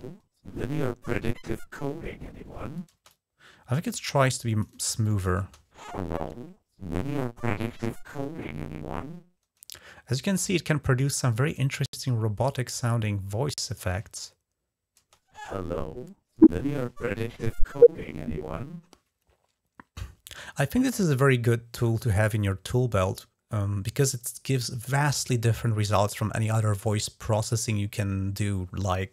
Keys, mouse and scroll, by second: 2.7 space, 2.9-3.8 drag, 4.0-4.7 drag, 4.9 click, 5.3 space, 11.4-13.8 drag, 13.8 space, 14.8 space.